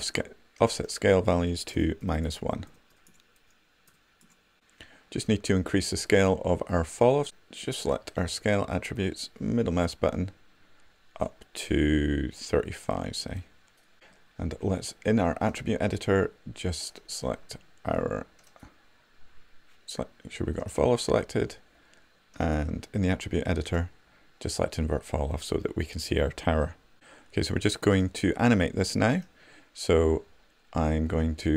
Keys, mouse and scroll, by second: 9.2-12.2 drag.